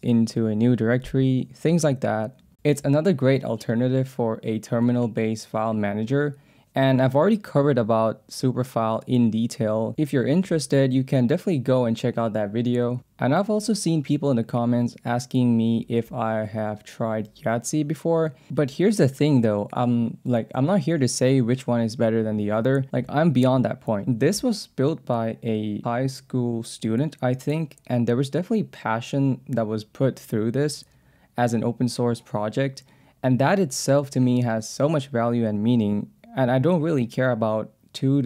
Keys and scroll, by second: 2.5 j, 2.8 Return, 3.5 k, 4.2 j, 5.1 ctrl+s, 5.2 j, 5.6 k, 6.2 k, 6.6 Return, 7.1 j, 8.0 ctrl+s, 8.1 j, 8.9 Return, 9.4 j, 9.7 k, 12.3-14.7 typing, 15.7 Tab, 17.7 ctrl+s, 19.4 ctrl+p, 25.4 Down, 26.1 Down, 26.7 Down, 27.2 Down, 27.9 Down, 30.3 Up.